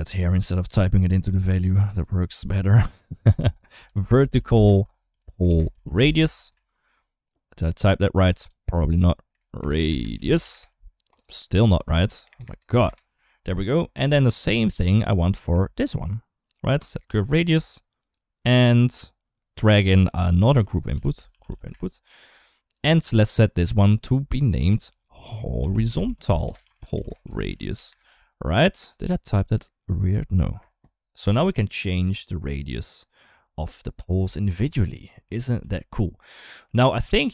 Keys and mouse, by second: 1.6-6.3 drag, 7.3 click, 8.3-10.3 drag, 9.5 BackSpace, 9.7 BackSpace, 12.1 BackSpace, 12.2 BackSpace, 14.0 shift+middle click, 14.4 shift+middle click, 14.7 click, 15.4 shift+d, 17.8 click, 20.2-22.6 drag, 24.4-27.7 shift+drag, 29.2-30.4 drag, 31.2-34.0 drag, 34.2 ctrl+z, 35.2 right click, 35.8 ctrl+s, 36.5-37.2 middle drag.